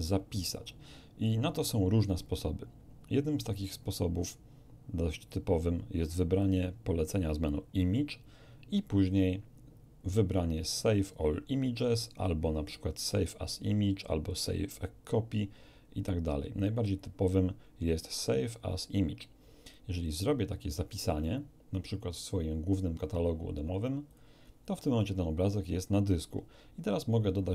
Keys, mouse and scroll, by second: 6.4 click, 19.6 click, 24.0 click.